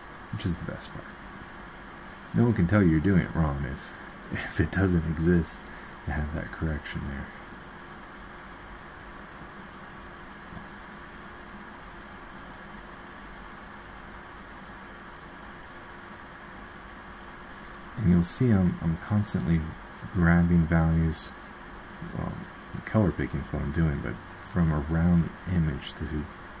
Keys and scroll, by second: 17.6 ctrl+z.